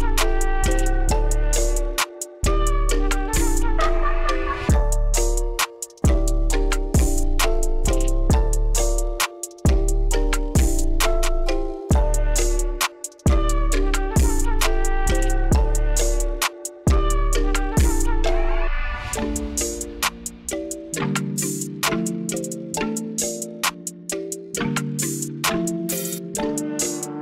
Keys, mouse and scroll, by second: 0.0 click, 0.9 click, 2.1 click, 4.7 click, 8.2 click, 9.6 KP_5, 10.6 Return, 12.2 Escape, 13.1 click, 18.2 click, 19.3 click, 22.7-23.9 drag, 25.0 click.